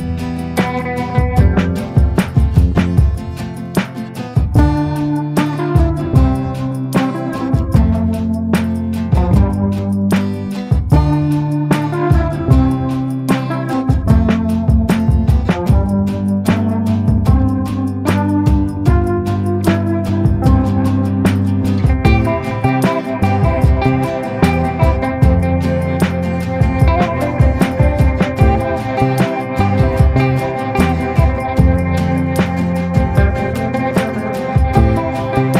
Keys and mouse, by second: 0.1 middle click, 0.5 shift+middle click, 0.9 b, 2.2 b, 3.5 b, 4.4 b, 5.0 b, 6.0 b, 7.0 middle click, 7.7-8.8 middle drag, 9.4 middle click, 9.7 shift+middle click, 10.3 b, 11.4 b, 12.0 b, 13.3 b, 15.3-16.7 middle drag, 17.2 shift+click, 17.6 b, 18.8 middle click, 23.7-28.8 drag, 30.9 middle click, 31.6 shift+middle click, 31.9 middle click, 32.4 shift+middle click, 32.8 b, 34.3-35.5 drag.